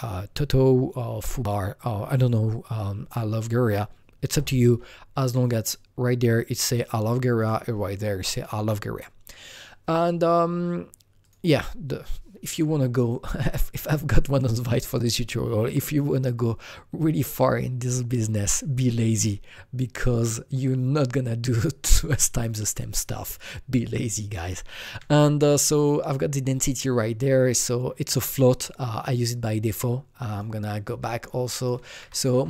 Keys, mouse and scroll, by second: 7.4 ctrl+v, 7.4 click, 7.4 click, 11.2 click, 11.3 click, 25.8 click, 26.5-29.4 drag, 30.3-31.6 drag, 31.6 click, 31.9 ctrl+v.